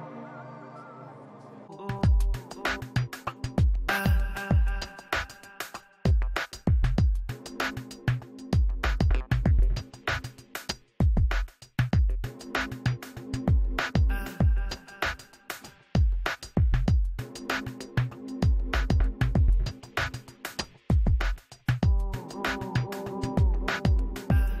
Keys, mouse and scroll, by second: 1.6-4.3 drag, 2.2-3.7 middle drag, 3.8-5.3 middle drag, 4.5-6.8 drag, 5.3 f, 6.1-7.9 middle drag, 6.9 i, 7.1 f, 7.5 f, 7.9-13.2 drag, 8.1 middle click, 8.8-10.1 middle drag, 10.4 middle click, 11.0 f, 12.0 f, 13.2 middle click, 14.0 f, 14.2-15.5 drag, 15.1-16.9 middle drag, 16.4 i, 16.6 f, 17.1-22.0 drag, 17.5 middle click, 17.6 f, 22.0-23.3 middle drag, 22.6 shift+c, 22.8 f, 23.3-24.6 drag.